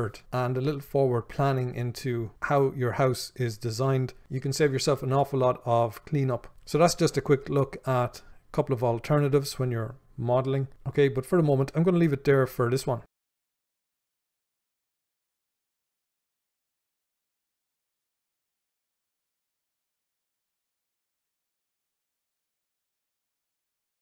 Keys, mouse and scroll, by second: 6.5 click.